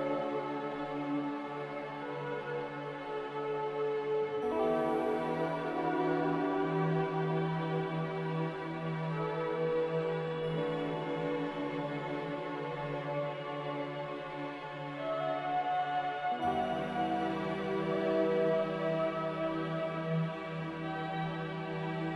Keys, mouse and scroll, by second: 12.9 a, 15.0 z, 17.6-18.5 typing, 18.7 Return.